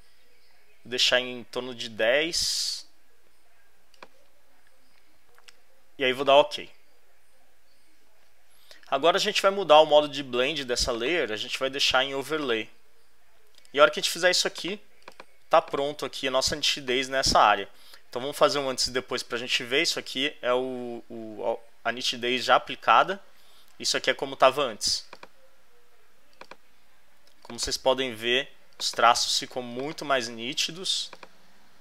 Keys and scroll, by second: 16.7 space.